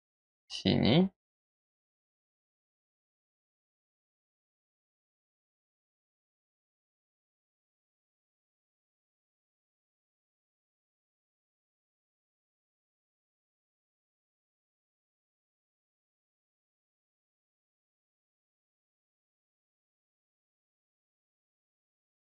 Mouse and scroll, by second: 0.2 click, 1.2 click, 2.2 click, 2.5 click, 3.2 click, 3.6 click, 3.8 click, 4.0 click, 4.5 click, 5.0 click, 5.6 click, 6.2 click, 6.6 click, 6.9 click, 7.2 click, 7.5 click, 7.6 click, 8.2 click, 8.4 click, 8.5 click, 9.0 click, 10.5 click, 13.2 click, 13.5 click, 13.9-15.2 middle drag, 15.2 click, 15.5 click, 16.0 click, 16.2 click, 16.5 click, 16.9 click, 17.0 click, 17.4 click, 17.6 click, 17.8 click, 18.6 click, 18.8 click, 19.1 click, 19.2 click, 19.6 click, 20.0 click, 20.2 click, 20.4 click, 21.0 click.